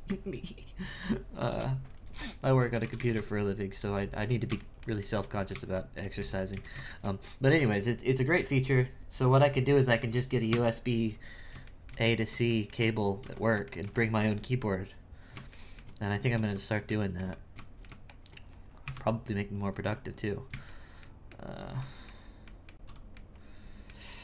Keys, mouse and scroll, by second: 2.5 right click, 2.7 g, 3.9-5.3 shift+middle drag, 5.3-5.7 scroll up 2, 5.7 shift+middle click, 6.2 z, 6.5 z, 6.9-10.0 shift+middle drag, 11.0-11.6 scroll down 3, 11.6 shift+middle click, 12.1-12.5 scroll up 1, 12.5 shift+middle click, 13.2 Tab, 13.6-15.1 shift+middle drag, 15.1-15.5 scroll down 1, 15.5 shift+middle click, 16.2 z, 16.7 shift+middle click, 17.1 z, 17.8-18.8 middle drag, 18.8 KP_1, 20.5 z, 21.0-24.1 middle drag, 24.1 scroll up 2.